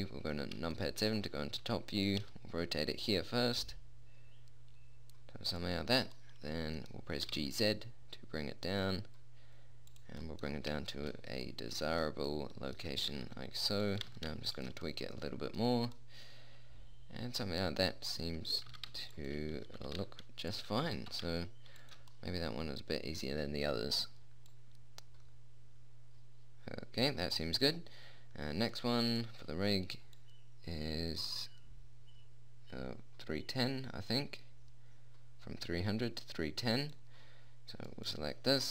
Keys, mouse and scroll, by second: 1.6 middle click, 2.0 r, 2.6 g, 7.6 g, 13.5 r, 14.4 g, 19.0 r, 20.0 g, 21.2 g, 22.6-25.8 middle drag, 25.8 click, 29.1-30.6 drag, 30.6 middle click, 31.2-33.5 drag, 36.4-38.3 middle drag, 38.3-38.7 right drag.